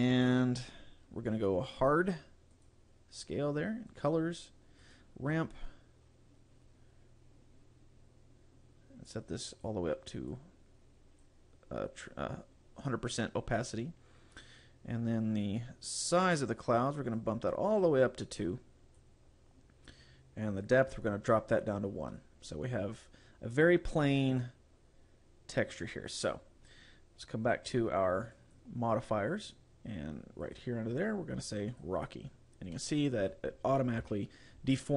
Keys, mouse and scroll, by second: 1.8 click, 2.6 click, 3.9 click, 4.9 click, 9.6 click, 14.2-16.8 scroll down 6, 17.2 click, 21.3 click, 23.4-25.0 scroll up 1, 25.0 scroll up 1, 25.6-26.2 scroll up 5, 28.4 click, 32.8 middle click, 34.1 KP_Decimal, 34.8-34.9 scroll down 3.